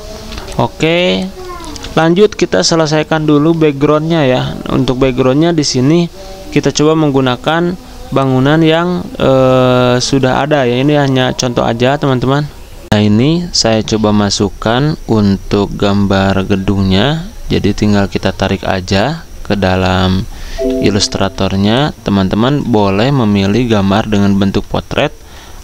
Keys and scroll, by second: 1.6 typing, 12.8 F9, 20.5 z.